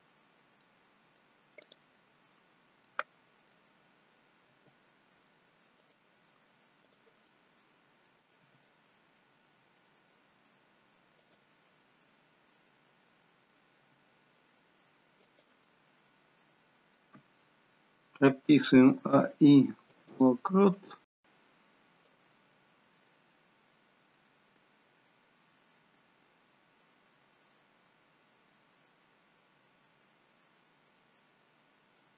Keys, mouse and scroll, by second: 0.7 middle click, 1.7 click, 2.9 middle click, 4.6 g, 7.0 click, 7.3 middle click, 8.5 g, 11.9 middle click, 13.9 g, 15.7 middle click, 19.1 a, 19.2 i, 22.3 click.